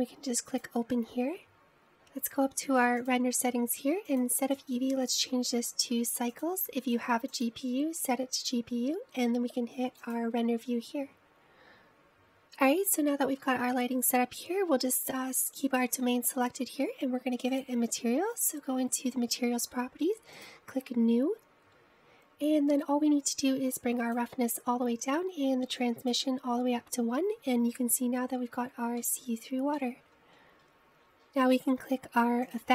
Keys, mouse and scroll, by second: 4.1 click, 5.2-10.4 drag, 11.7 click, 18.6 click, 21.5-22.2 drag, 24.9 click, 25.5-26.9 scroll down 10, 26.9-28.5 drag, 28.5-29.7 scroll up 2, 29.7-30.0 scroll down 2, 30.0 shift+middle click, 30.7-31.2 scroll up 1, 32.2 click.